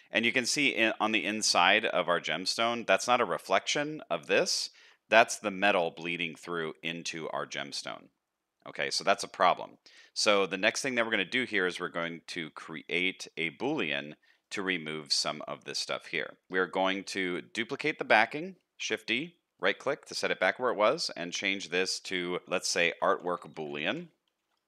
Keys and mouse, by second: 1.5 shift+middle drag, 2.5-2.9 middle drag, 4.6 shift+middle drag, 7.2-7.9 middle drag, 8.6-8.9 middle drag, 9.5 middle click, 10.5 middle click, 11.5 z, 12.8 middle click, 14.8 middle click, 15.7 shift+middle click, 18.7 shift+d, 21.7-24.6 drag.